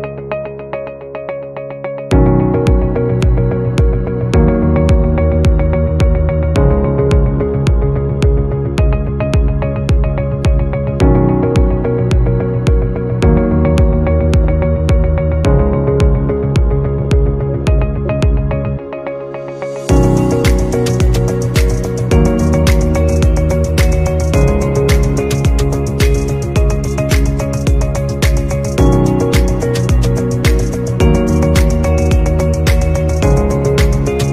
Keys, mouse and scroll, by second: 0.5-0.8 alt+scroll down 2, 8.6 double click, 9.1 scroll up 1, 15.4 typing, 16.6-18.5 typing, 20.8 typing, 25.7 scroll up 1, 26.4 typing, 27.6-28.0 typing, 28.2 scroll down 1, 28.6 scroll up 1, 29.9 scroll down 1.